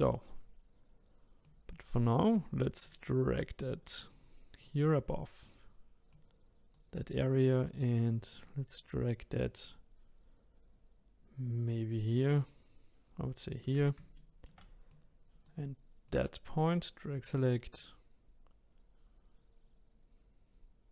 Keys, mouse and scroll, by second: 1.4 click, 1.4 typing, 2.6-3.3 typing, 2.8 click, 5.9-6.6 typing, 7.8-8.5 typing, 8.0 click, 13.9-14.6 typing, 14.2 shift+middle click, 14.9 click, 16.1 click, 16.1 typing.